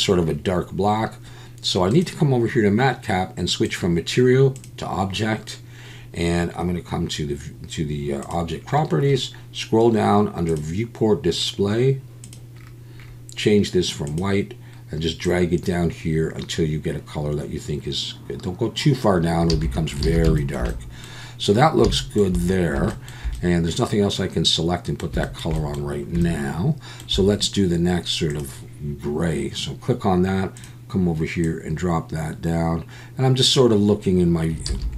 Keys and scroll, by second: 19.5 a, 20.0 alt+a, 34.7 alt+a.